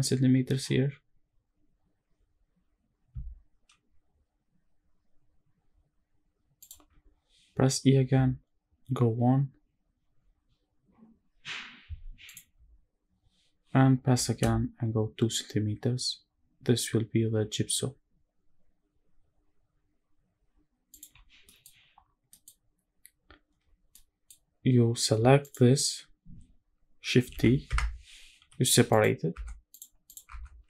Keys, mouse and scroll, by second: 6.3 shift+click, 12.0 shift+click, 12.4-13.8 scroll up 1, 13.8 i, 20.6 shift+click, 21.0 scroll down 1, 21.2 middle click, 21.5-22.0 scroll up 1, 22.0 middle click, 22.6-23.5 scroll up 1, 23.5 scroll up 1, 23.7 middle click, 24.0-24.9 scroll down 2, 24.3-24.9 scroll up 1, 25.2 alt+click, 27.0 shift+d, 27.5 Escape, 28.1 p, 29.0 Tab, 29.8 click, 30.0 Tab, 30.5 click.